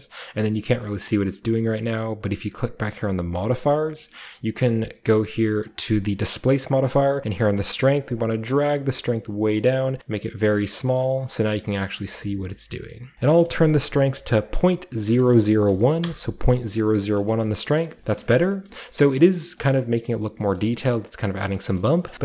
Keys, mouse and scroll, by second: 0.8-2.8 middle drag, 3.3-5.0 drag, 5.0-7.1 scroll down 1, 7.1-7.4 scroll down 1, 7.4-11.0 shift+drag, 11.2-13.1 shift+scroll up 2, 11.7-13.1 shift+middle drag, 13.1-15.7 drag, 15.7 typing, 16.0 Return, 17.2 shift+middle drag, 17.5 shift+middle drag, 17.5-20.2 shift+scroll up 2, 17.8 shift+middle drag, 18.1 middle drag, 18.4 middle drag, 18.7 middle click, 19.7-20.4 middle drag, 20.6-22.2 middle drag, 21.8-22.2 shift+scroll up 3.